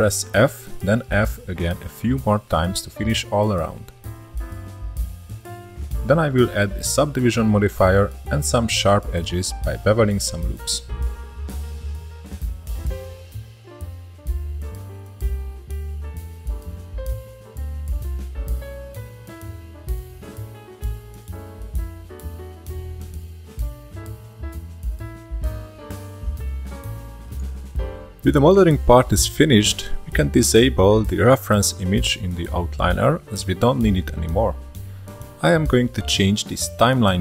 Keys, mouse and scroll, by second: 0.0 click, 0.3 shift+middle click, 0.8-3.3 typing, 1.2 shift+middle click, 1.8 shift+middle click, 2.5 shift+middle click, 3.6-4.0 scroll down 3, 4.0-5.7 shift+middle drag, 5.7 click, 6.0-7.8 right drag, 7.8-8.3 middle drag, 8.3 scroll up 1, 9.3 ctrl+3, 11.1 click, 11.7 scroll up 3, 11.8 Tab, 12.0 shift+middle drag, 12.3 2, 12.5 alt+click, 12.9-13.3 alt+shift+drag, 13.6 alt+shift+click, 13.9 alt+shift+click, 14.2 shift+middle click, 14.3 ctrl+b, 15.9 alt+shift+click, 16.1 shift+middle click, 16.3 scroll up 1, 16.6 ctrl+b, 18.2 2, 18.2 click, 18.4-19.5 shift+middle drag, 19.5 ctrl+click, 19.8 scroll down 2, 19.9 shift+middle click, 20.9 shift+middle click, 21.1 scroll up 2, 22.0 alt+s, 22.9 click, 23.4 alt+s, 24.9 shift+middle click, 25.6 scroll up 1, 25.9 alt+s, 27.8-30.1 shift+middle drag, 30.1 click, 30.4-32.6 shift+middle drag, 33.0 click, 34.3 click, 35.0 click, 35.9 scroll down 1, 36.0-37.2 drag.